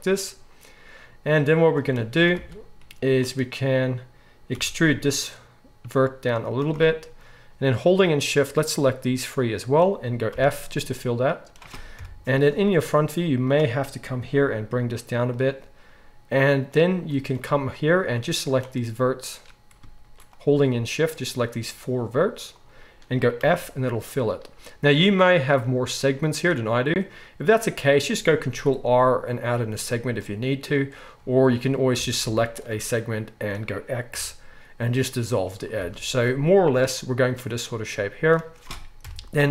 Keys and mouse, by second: 2.3 alt+a, 3.0 click, 3.1-8.0 middle drag, 4.5 e, 8.0 shift+click, 8.1 shift+middle click, 8.6 shift+click, 8.7-17.7 shift+middle drag, 10.3 f, 12.0 KP_1, 14.4 g, 17.7-20.3 shift+drag, 20.3-21.7 middle drag, 21.7 shift+click, 21.8 shift+middle click, 22.6 shift+click, 22.7-28.3 shift+middle drag, 23.4 f, 28.4 ctrl+r, 31.9 alt+a, 32.6-39.5 shift+middle drag, 34.1 x, 35.8 alt+a, 39.0 KP_1.